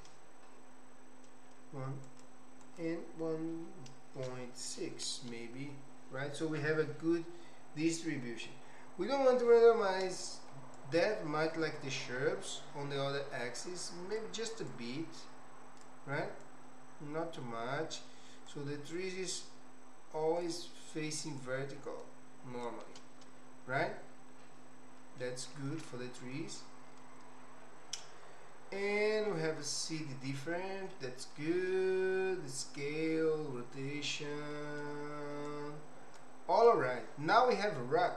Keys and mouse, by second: 2.6-5.3 drag, 10.7-14.3 shift+drag, 14.7-16.0 shift+drag, 16.4-18.1 shift+drag, 18.5-20.5 shift+drag, 21.4-22.7 shift+drag, 25.0 middle click, 26.3 middle click, 29.3 middle click, 30.9 middle click, 31.7-34.1 middle drag, 34.5 middle click, 35.6 click.